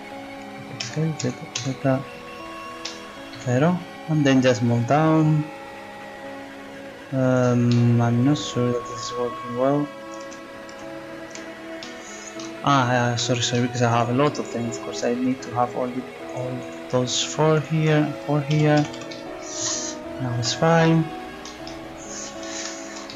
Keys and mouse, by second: 0.8 s, 4.7-6.0 drag, 6.1 click, 10.2 ctrl+z, 10.7 ctrl+z, 13.9 right click, 14.2-15.7 drag, 18.5 s, 20.6 middle click, 21.8 middle click, 22.2 z.